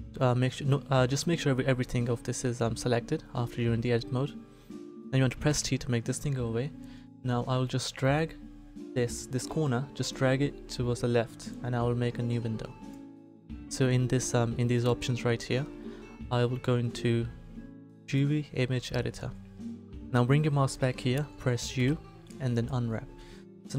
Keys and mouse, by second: 5.4 t, 9.6-11.3 middle drag, 21.7 u.